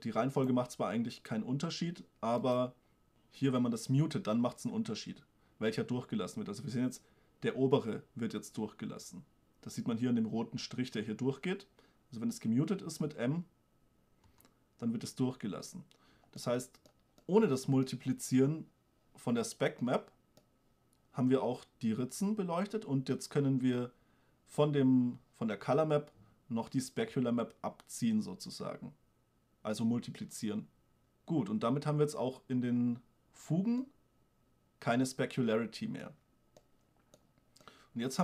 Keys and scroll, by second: 13.4 m, 27.4 m.